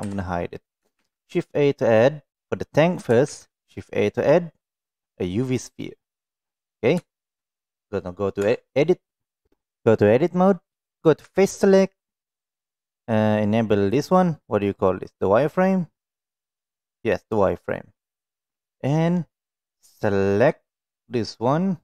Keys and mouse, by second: 0.0 h, 0.7 click, 0.9 shift+a, 3.2 shift+a, 8.4 Tab, 11.2 3, 13.8 click, 18.0-19.4 drag, 19.9-21.8 drag.